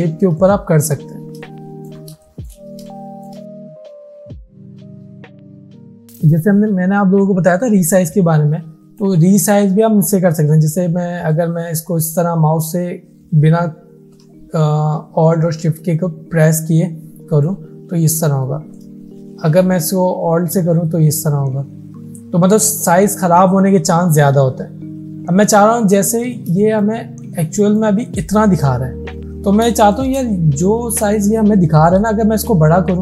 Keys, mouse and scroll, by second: 0.5-1.1 alt+shift+click, 2.2 shift+space, 2.3 click, 3.0-3.6 alt+shift+click, 4.6 space, 4.6 click, 4.7 click, 5.3 alt+scroll up 1, 5.7 space, 5.8 click, 8.4-9.3 drag, 18.8-26.4 alt+drag, 26.6 space, 26.7 click, 28.8 alt+scroll up 1, 29.3 alt+scroll down 1, 29.8 space, 29.9 click, 32.0-33.0 drag.